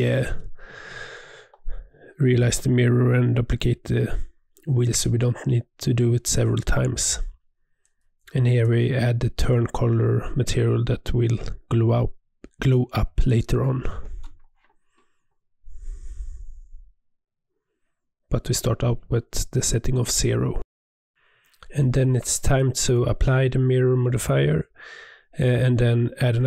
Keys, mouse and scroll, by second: 0.3 click, 0.4 3, 0.7-1.0 scroll up 1, 1.0 alt+click, 1.8 click, 2.9 alt+shift+click, 3.5-5.1 drag, 7.3 click, 8.8-10.1 scroll down 11, 10.1 scroll up 10, 10.4 scroll down 1, 10.6 click, 10.8 click, 12.4-12.9 drag, 12.9-13.3 scroll down 2, 13.3-13.8 drag, 13.8 scroll down 10, 14.2 click, 16.6-17.7 drag, 18.0 click, 18.1 scroll down 1, 18.3 middle click, 18.8 scroll up 1, 18.9 scroll down 1, 19.0 middle click, 19.9 Tab, 20.2-21.8 middle drag, 22.4 click, 22.8 click, 23.0 ctrl+a, 24.5 click, 25.0-25.3 middle drag, 25.3 Tab, 25.5 Tab, 25.8 g.